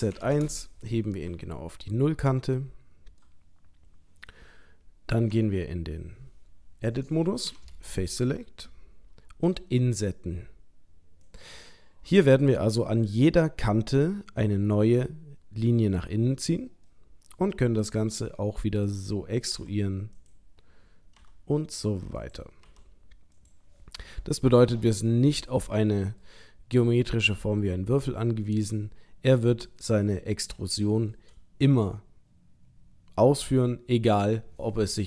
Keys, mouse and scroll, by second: 1.3 KP_3, 2.5 middle click, 3.6-4.3 scroll up 1, 5.3 Tab, 7.5 3, 7.9 click, 9.5 i, 11.8 middle click, 16.9 middle click, 18.1 e, 19.5 s, 21.2 i, 22.7 e, 24.1 middle click, 26.9 middle click, 30.5 shift+middle click.